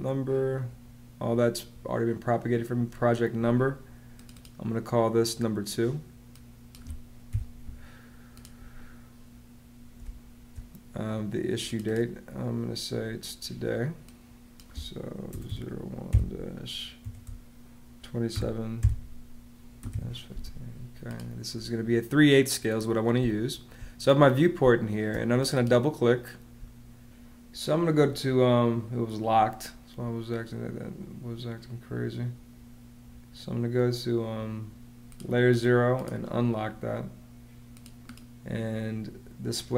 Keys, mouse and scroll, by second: 7.2 2, 9.9 space, 14.9-16.9 typing, 18.2-20.3 typing, 23.0 space, 24.5 space, 26.4 space.